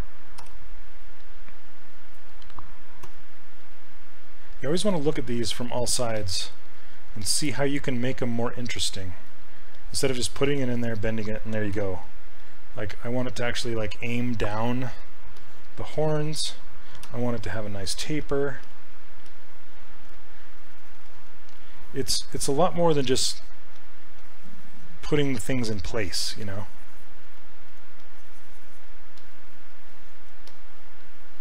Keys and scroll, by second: 0.4 r, 3.1 w, 11.8 r, 17.1 q, 18.7 s, 23.8 s.